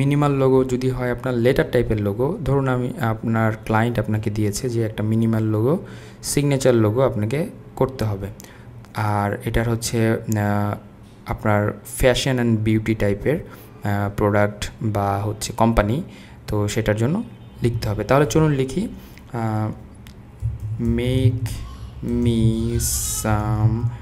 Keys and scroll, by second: 20.2-24.0 typing.